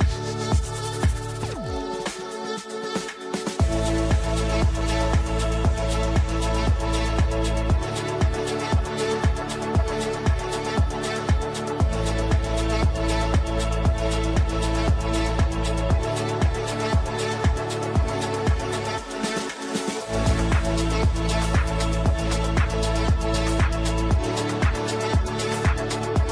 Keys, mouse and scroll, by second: 0.6 drag, 1.8-3.1 ctrl+drag, 4.6-5.4 drag, 6.4 t, 7.1 click, 8.1 shift+F2, 9.2-11.6 drag, 12.0 shift+f, 12.3 shift+n, 14.2 click, 17.6 shift+click, 18.0 c, 18.2-24.6 shift+drag, 24.8 shift+click, 25.2 c, 25.9 click.